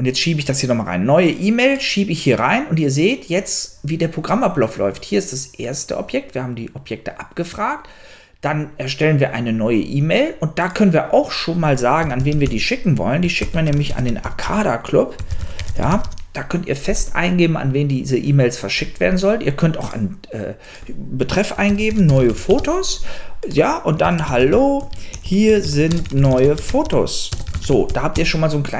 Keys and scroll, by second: 11.8-16.5 typing, 13.2 alt+o, 13.4 alt+l, 13.5 alt+a, 21.4-28.6 typing.